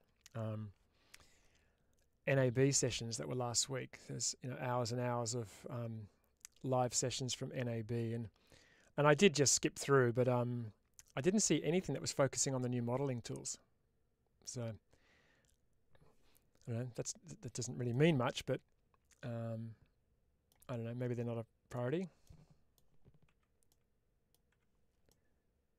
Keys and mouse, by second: 17.8-20.4 middle drag, 22.1 middle click, 23.2 4, 23.6 middle click.